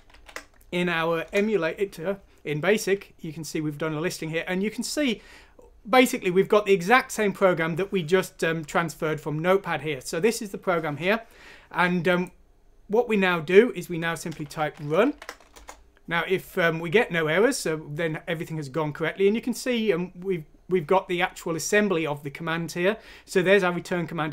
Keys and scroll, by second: 0.0-0.6 typing, 1.2 Return, 1.6 typing, 14.1-15.5 typing.